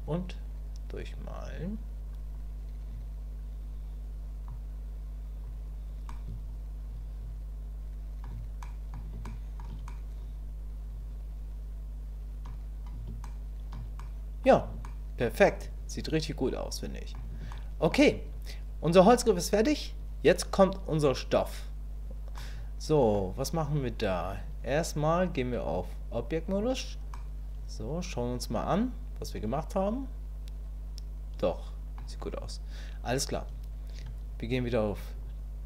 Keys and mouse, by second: 0.0-5.4 drag, 6.1-8.2 middle drag, 8.6 middle click, 9.3 shift+middle click, 9.9-12.4 middle drag, 13.3 shift+click, 14.0 click, 14.8 shift+click, 15.5-17.1 drag, 17.5 shift+click, 22.4 middle click, 25.6-26.6 drag, 27.1-32.0 middle drag, 35.2-35.6 drag.